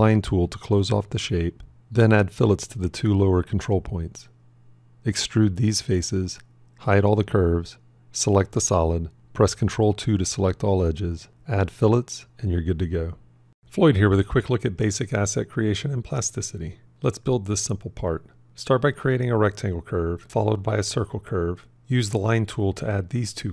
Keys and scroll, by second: 2.4 b, 7.2 h, 9.6 ctrl+2.